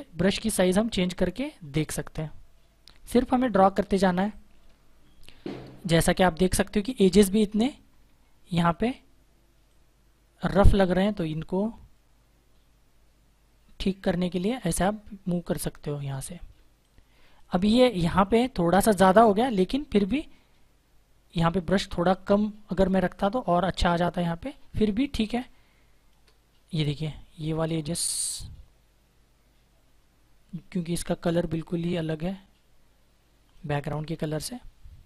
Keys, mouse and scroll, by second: 0.1 click, 4.0 space, 4.1 click, 7.3-7.9 typing, 9.5 click, 16.7 click, 16.8 space, 19.8 click, 25.1 space, 25.2 click, 25.6 space, 27.0 click.